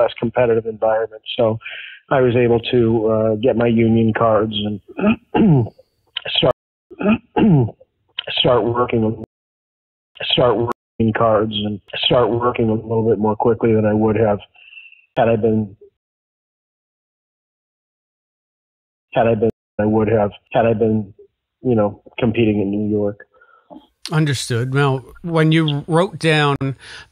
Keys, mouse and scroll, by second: 0.0-2.5 drag, 2.9 click, 3.8 click, 4.6-5.8 drag, 6.4 space, 6.8 click, 6.8 space, 7.3-9.2 drag, 9.2 space, 9.8 ctrl+shift+Delete, 10.1 space, 10.6 space, 10.8 click, 10.9 space, 12.7 click, 13.8 click, 15.1 click, 15.9 space, 16.2-18.2 drag, 18.8 ctrl+shift+Delete, 19.0 space, 19.4 space, 19.6 click, 19.7 space, 24.0-26.0 drag, 26.5 Delete.